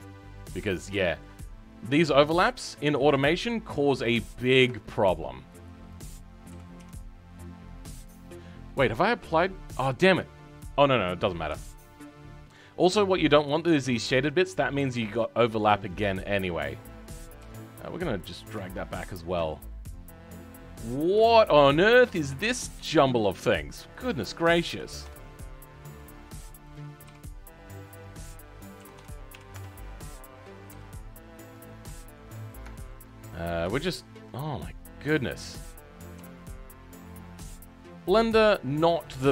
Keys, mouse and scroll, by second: 5.8 click, 6.5 s.